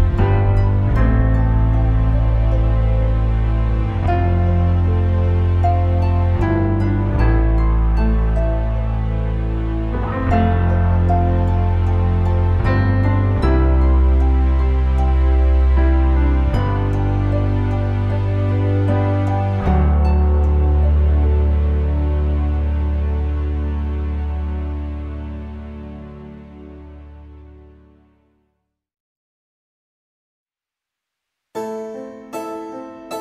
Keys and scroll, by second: 18.8 5, 19.7 Return, 23.1 4, 23.5 Return.